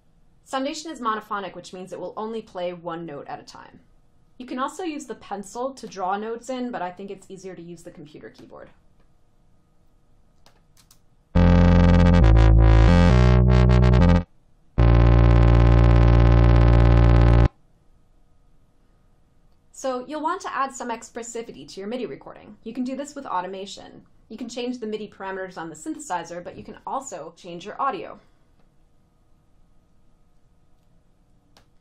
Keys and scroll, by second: 11.0 space, 17.4 space.